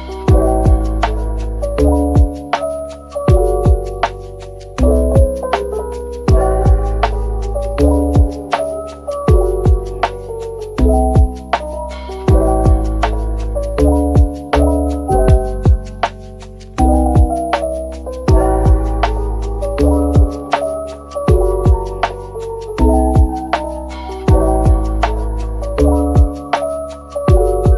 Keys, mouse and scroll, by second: 2.3 /, 3.1 middle click, 3.6 scroll up 1, 3.9 middle click, 5.2 shift+click, 6.8-7.4 typing, 8.6 double click, 9.3-10.3 typing, 9.7 right click, 10.9 right click, 11.6 /, 12.3 middle click, 14.8 scroll up 1, 17.4 scroll down 1, 19.8 scroll up 1, 23.0 shift+click, 23.8 shift+click, 24.9 scroll down 1, 25.6 shift+click, 26.8 shift+click.